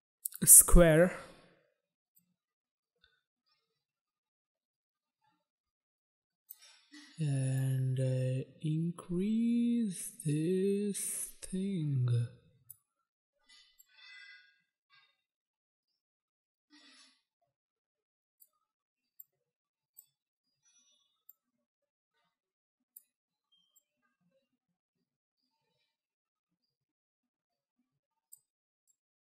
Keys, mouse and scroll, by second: 0.3 click, 0.5 click, 2.4 click, 7.8 click, 13.9 click, 19.4 click, 21.5 click, 24.0 click, 29.0 click.